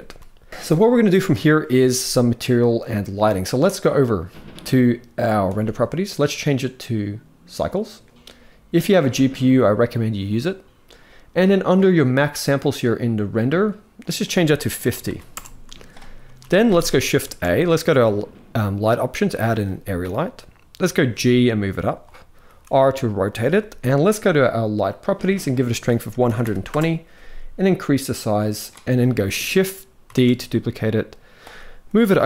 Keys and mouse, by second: 5.2 click, 6.1-7.4 drag, 8.6-10.2 drag, 13.8-15.1 drag, 16.0 ctrl+s, 17.0 shift+a, 20.7 g, 22.2 r, 23.2 g, 25.6 click, 27.6 click, 29.9 shift+d, 32.0 r.